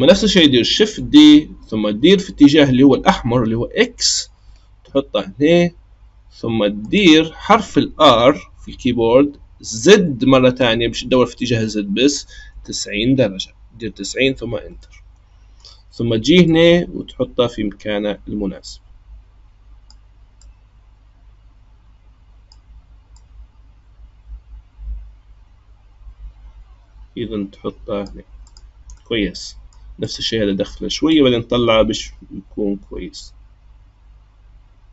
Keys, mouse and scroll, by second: 0.7 shift+d, 7.9 r, 14.8-16.5 middle drag, 16.5 click, 20.4 click, 23.1 click, 28.4 click, 29.0-30.0 middle drag, 30.0 click, 31.1 click.